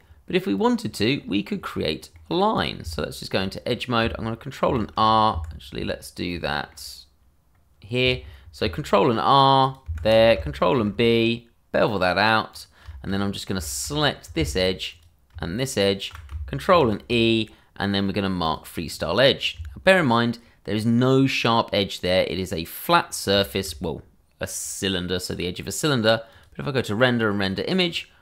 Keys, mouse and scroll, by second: 0.5 click, 1.2 scroll up 1, 1.9 scroll down 1, 2.1 middle click, 2.5 click, 2.8 Tab, 3.6-4.0 scroll up 1, 4.6 ctrl+r, 5.3 Escape, 5.6-6.3 scroll down 1, 6.4 shift+middle click, 8.6 ctrl+r, 9.6 click, 9.8 Escape, 10.7 ctrl+b, 12.5 click, 12.9 shift+middle click, 13.1 scroll up 1, 13.6 shift+middle click, 13.8 middle click, 13.8 scroll up 2, 14.9 alt+click, 15.0 click, 15.8 alt+shift+click, 16.1 click, 16.7 ctrl+e, 18.4 click, 18.8 scroll down 1, 19.5 Tab, 21.1 scroll down 1, 22.0 middle click, 23.0-23.3 scroll down 1, 23.4 shift+middle click, 26.3 click.